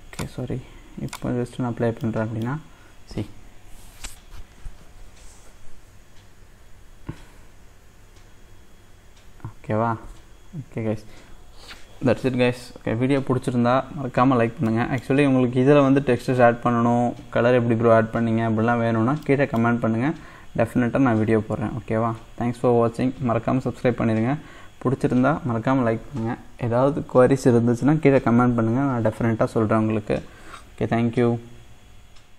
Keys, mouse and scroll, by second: 1.8 scroll down 1, 2.1-14.0 middle drag, 14.0-14.8 scroll down 1, 14.8-17.0 middle drag, 17.0-19.3 scroll up 1, 19.3-31.9 middle drag.